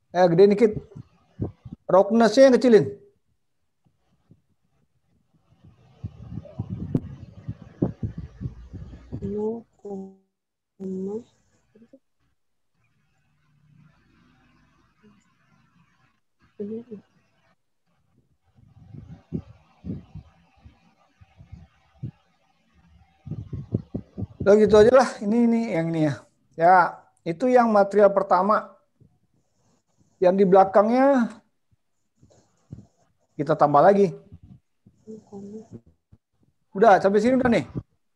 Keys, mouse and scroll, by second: 3.1 click, 7.8 scroll up 1, 8.5-9.7 scroll up 6, 9.7-10.4 scroll down 5, 10.9 scroll down 1, 17.8 click, 26.0 click.